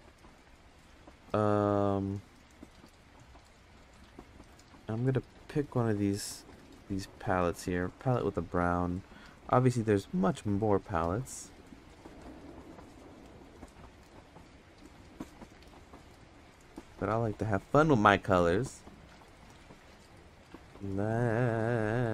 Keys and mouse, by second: 3.5 click, 4.0 click, 7.4 click.